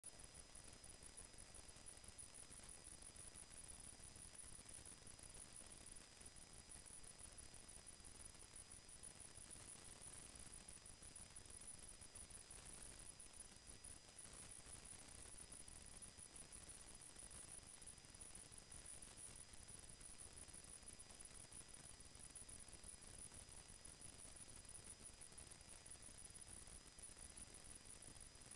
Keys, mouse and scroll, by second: 4.0 click, 11.8 space, 13.7 click, 16.2 space, 18.3 click, 20.4 click, 23.2 click, 26.4 click.